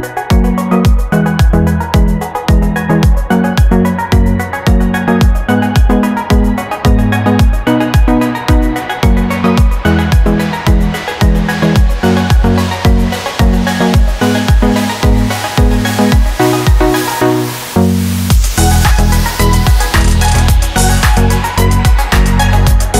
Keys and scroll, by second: 8.2 super+v.